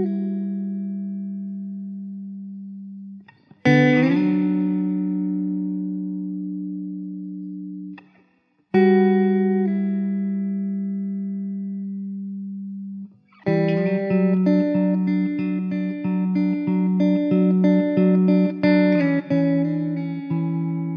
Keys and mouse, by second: 0.6 middle click, 3.2 middle click, 14.1 e, 14.9 alt+middle click, 15.0 alt+w, 18.5 alt+w, 19.9 alt+middle click, 19.9 alt+q, 20.2 alt+middle click.